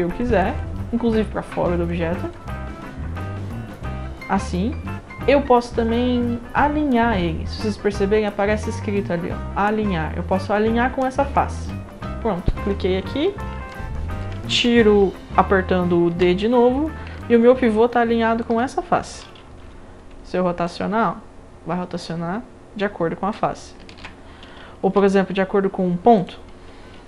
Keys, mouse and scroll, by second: 0.2-0.6 drag, 1.2 click, 1.3-1.9 right drag, 2.3-3.8 drag, 2.3-3.6 right drag, 11.5 click, 12.6 scroll up 1, 13.7-14.2 alt+drag, 16.1 d, 17.2-18.4 alt+drag, 19.6 e, 20.7-23.3 drag, 23.9 ctrl+z, 24.8 d, 26.2 click.